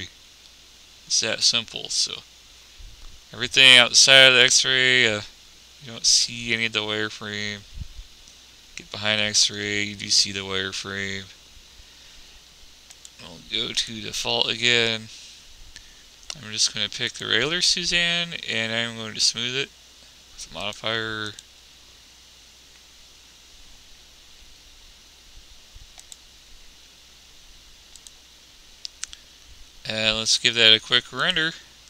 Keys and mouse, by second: 1.2 click, 2.8 click, 15.0-16.4 middle drag, 19.1-20.7 middle drag, 28.1-30.1 drag, 30.5 click.